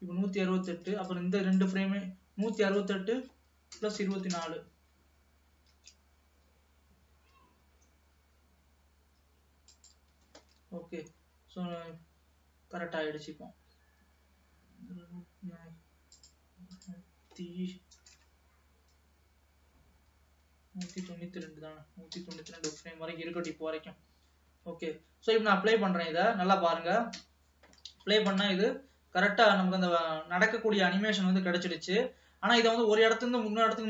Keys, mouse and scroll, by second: 5.9 shift+d, 10.5 ctrl+s, 10.9-11.2 scroll down 3, 11.8 space, 14.9 space, 16.2-18.2 drag, 18.2 BackSpace, 21.0 BackSpace, 23.3 ctrl+s, 24.3 space, 24.9 space, 26.2 scroll down 2, 27.5 space, 27.9-28.2 scroll down 1, 28.2 middle click, 29.1-29.5 scroll up 2, 29.5-31.4 middle drag, 31.4-32.4 scroll down 1, 32.4-33.7 scroll down 1, 33.7-33.8 scroll down 1.